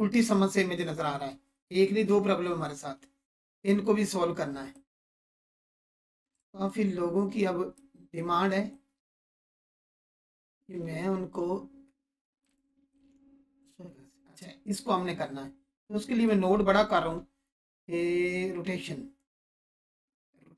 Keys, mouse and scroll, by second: 4.7 click, 7.7-8.3 click, 9.3-10.1 scroll up 1, 10.2-10.8 alt+shift+drag, 11.8 scroll up 1, 12.4-13.0 alt+shift+drag, 15.0-15.6 scroll up 2, 15.6 scroll up 1, 16.2-17.2 alt+shift+drag.